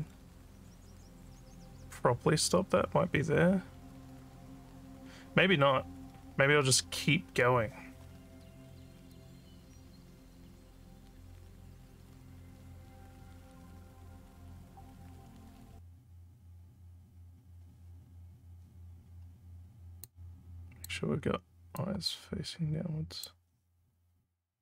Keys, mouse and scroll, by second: 2.5 scroll up 1, 20.0 click, 21.7-23.2 drag.